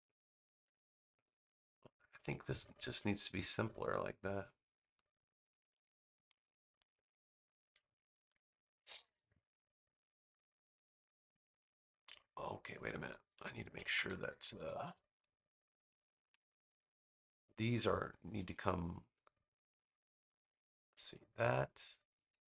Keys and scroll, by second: 0.5 BackSpace, 13.8 super+-, 14.3 -, 15.3 space.